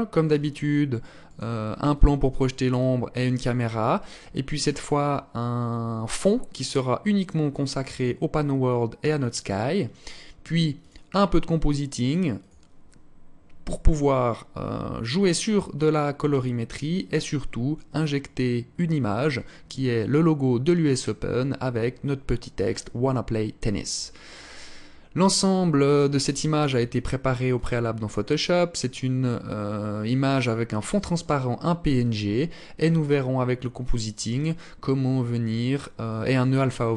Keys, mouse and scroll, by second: 1.0 right click, 1.6 alt+click, 2.5 alt+click, 5.8 click, 10.5 click.